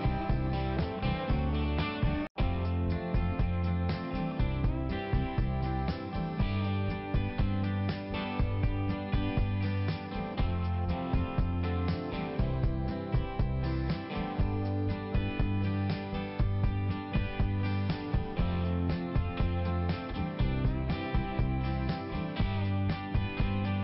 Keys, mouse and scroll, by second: 0.7 click.